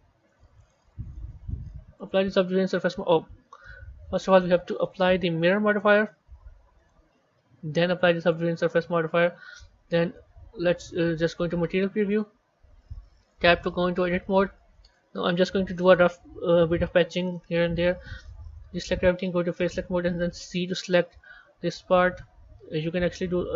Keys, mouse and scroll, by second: 0.5 click, 1.9 click, 3.6 ctrl+z, 4.8 click, 5.7 click, 6.7-10.1 drag, 10.1 z, 10.9 z, 13.2 b, 15.8 click, 17.3-18.6 middle drag, 19.4 click.